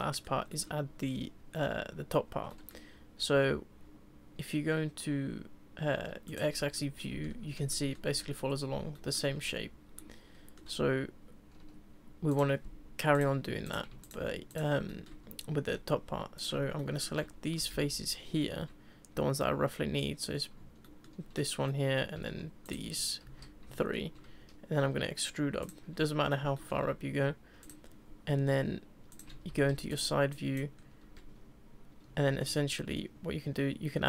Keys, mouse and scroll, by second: 0.4 scroll up 1, 0.5-3.3 middle drag, 3.3 Tab, 6.3 click, 6.7 shift+middle click, 7.3 Tab, 7.7-11.6 shift+middle drag, 11.6 Tab, 12.3 click, 13.1 click, 13.6 click, 14.0 shift+click, 14.5 shift+click, 14.9-16.3 middle drag, 16.3 click, 16.8 shift+middle click, 17.7 z, 20.8-22.6 shift+middle drag, 22.6 shift+click, 23.2 z, 23.8-24.8 shift+middle drag, 24.8 e, 26.1-27.6 middle drag, 27.6 click, 29.1 click, 29.5 z, 29.9 click, 30.3 click, 30.7 scroll up 2, 32.3 ctrl+r.